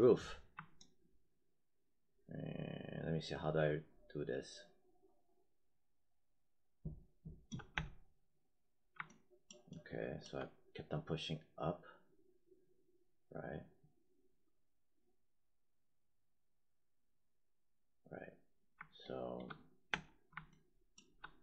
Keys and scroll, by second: 7.6 space, 19.8 space.